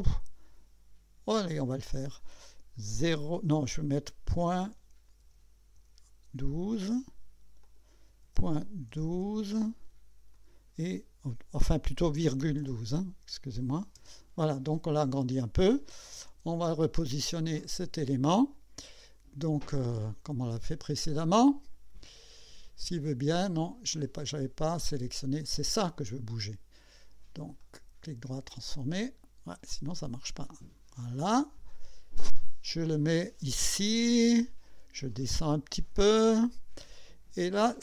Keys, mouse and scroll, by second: 1.5 click, 4.5 ,, 5.2 1, 5.8 2, 7.6 click, 8.2 ,, 8.9 1, 9.1 KP_2, 10.3 click, 12.0-13.1 typing, 14.0 Return, 16.3 KP_2, 18.0 click, 19.6 click, 21.3-23.1 drag, 23.5 click, 25.4 click, 27.6 right click, 28.4 click, 29.9-31.0 drag, 31.7-33.4 drag, 34.3-36.1 drag.